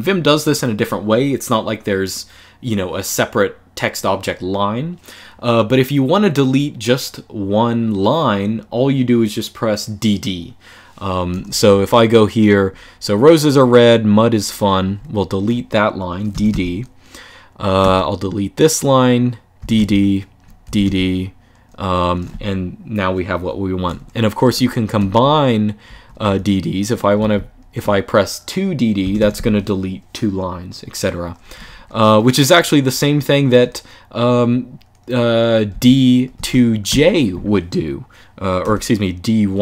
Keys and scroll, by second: 11.4 j, 16.0 d, 16.2 d, 17.5 typing, 19.3-20.6 typing, 24.2-26.9 typing, 28.7 typing, 31.3 typing, 35.4-36.6 typing, 38.3 typing.